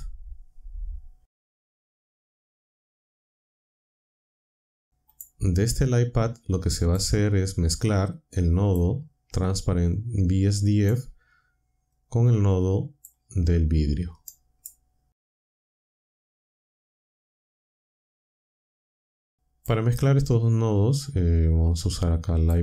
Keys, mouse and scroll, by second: 1.7 shift+a, 5.1 click, 6.8 click, 7.8-8.8 drag, 9.9-11.0 drag, 11.9-13.1 drag, 14.2 click, 16.0 click, 16.8 click, 18.1-18.7 drag, 19.2-19.8 drag, 21.8-22.6 drag.